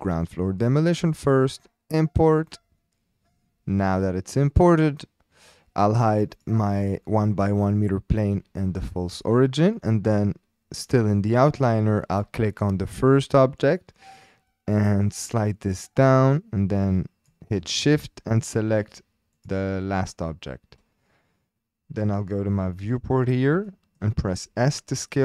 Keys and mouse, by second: 6.4 click, 7.0 shift+click, 8.7 h, 9.7 click, 15.2-17.3 drag, 18.4 shift+click, 19.4 shift+click, 22.7 shift+drag, 23.7-24.0 shift+drag, 24.4 s.